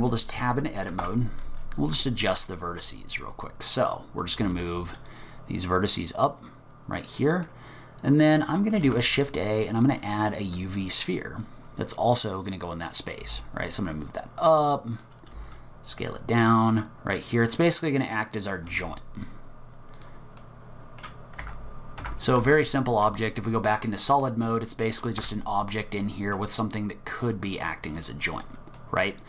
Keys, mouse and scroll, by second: 0.9 1, 1.0 1, 1.9 z, 3.2 click, 4.4 g, 7.5 middle click, 8.9 shift+a, 12.4 click, 13.2 g, 15.3 s, 18.7 g, 20.4 middle click, 21.4 Tab, 22.0 Tab, 22.4 z, 23.6-23.9 scroll down 2, 23.9 middle click, 24.6 click, 25.2 Tab, 26.0 middle click, 28.2 scroll down 3, 28.8 middle click.